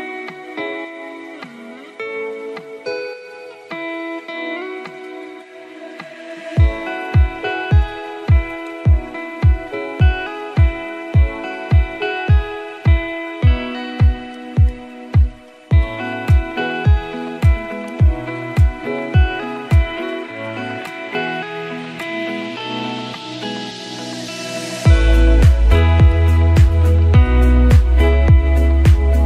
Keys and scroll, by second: 8.9 c.